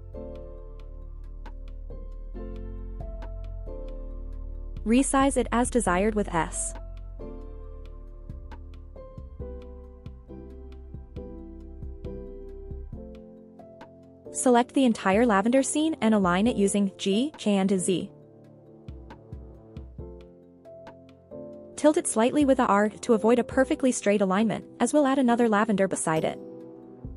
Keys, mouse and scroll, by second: 0.0 r, 0.7 right click, 0.9 r, 1.4 click, 2.0 click, 2.1 r, 3.3 click, 3.7 click, 4.0-4.7 scroll down 3, 4.8-6.0 scroll up 3, 6.0 click, 7.5 s, 8.7-9.1 drag, 9.4 s, 12.0 drag, 12.3 scroll down 1, 12.6 shift+middle drag, 13.1-13.8 scroll up 1, 13.8 click, 14.1 middle click, 14.1 typing, 14.6-15.4 scroll down 3, 15.4-16.0 scroll up 3, 16.6-17.3 shift+middle drag, 17.9 click, 18.6 scroll down 1, 18.9-19.3 shift+middle drag, 19.4-19.8 scroll up 1, 19.8 g, 20.0 z, 22.2 click, 22.6 shift+middle click, 23.3-23.9 scroll up 1, 23.9 r, 26.3 click, 26.7 g, 26.9 y.